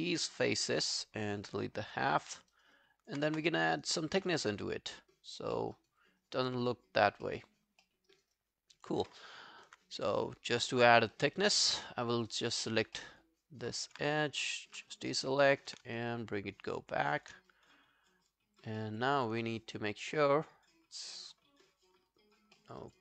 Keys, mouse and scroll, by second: 2.1 Delete, 2.3 alt+middle click, 2.5 alt+right click, 2.8 alt+click, 3.3 space, 4.1 space, 4.7 alt+click, 5.6 alt+middle click, 5.8 alt+right click, 6.0 alt+click, 7.3 alt+middle click, 7.6 alt+scroll down 1, 7.8 alt+middle click, 8.1 alt+right click, 8.4 alt+click, 9.1 alt+middle click, 9.9 right click, 11.2 double click, 11.8 alt+middle click, 12.1 alt+scroll down 1, 12.3 alt+click, 12.8 alt+scroll down 1, 13.0 alt+middle click, 13.4 alt+scroll down 1, 13.6 alt+click, 14.2 ctrl+click, 14.9 alt+click, 15.1 alt+right click, 15.4 alt+middle click, 15.6 alt+right click, 16.4 shift+click, 17.5 shift+click, 18.8 alt+middle click, 19.1 alt+click, 22.1 alt+click, 22.6 alt+middle click, 22.8 alt+right click.